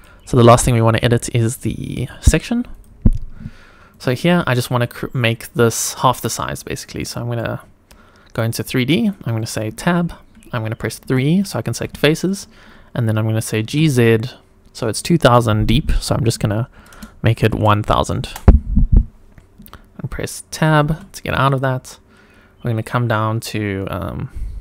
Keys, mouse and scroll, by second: 1.9-2.8 drag, 3.9 click, 7.0-7.4 middle drag, 7.6-9.0 scroll down 5, 8.4-9.0 middle drag, 9.7 Tab, 11.0 3, 11.4 click, 12.0 shift+middle click, 13.6 g, 13.8 z, 16.4 KP_1, 16.7 KP_0, 16.9 KP_0, 17.5 KP_0, 18.2 Return, 20.8 Tab, 21.4 click, 22.6 click.